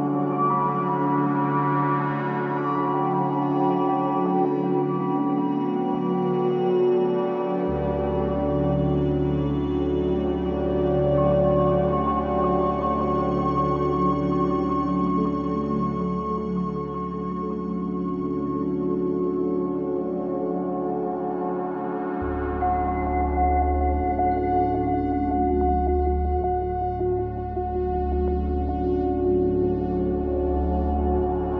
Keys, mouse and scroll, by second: 1.4-1.8 scroll down 4, 1.8-4.5 middle drag, 6.7 ctrl+a, 7.6 shift+a, 10.1-10.5 drag, 10.7-12.3 drag, 14.6 click, 16.0-16.7 scroll down 3, 16.7 click, 17.4-17.9 scroll up 2, 18.7 click, 20.6 click, 21.4 click, 22.1 scroll up 1, 22.6 shift+middle click, 23.2-23.6 scroll up 1, 23.6 shift+middle click, 24.0-24.4 scroll up 1, 24.4 shift+middle click, 25.0 click, 26.2 click, 28.0 click, 28.8 scroll up 1, 29.1-31.0 middle drag.